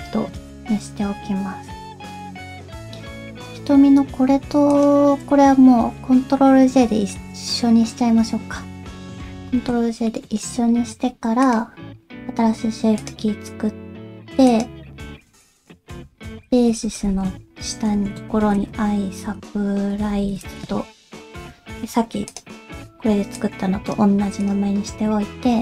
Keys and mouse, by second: 2.4 click, 5.9-7.1 middle drag, 7.6 middle click, 9.4 ctrl+j, 10.0 middle click, 11.4 click, 13.0 click, 14.4 click, 15.6-20.6 drag, 22.2 click, 23.4 click, 24.4 click, 24.9 Tab.